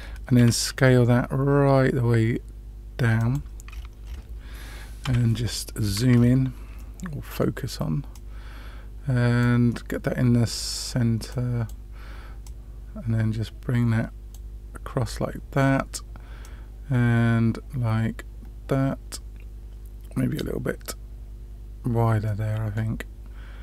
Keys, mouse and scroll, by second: 0.3 s, 3.7-5.0 scroll up 3, 5.0 KP_Decimal, 5.8-6.1 scroll down 3, 6.1 scroll up 1, 6.7-7.4 middle drag, 6.7-7.3 scroll down 1, 8.1-9.4 drag, 9.6 middle click, 11.2 click, 12.4-14.3 drag, 15.0-15.6 middle drag, 16.4-20.3 drag, 22.2 middle click.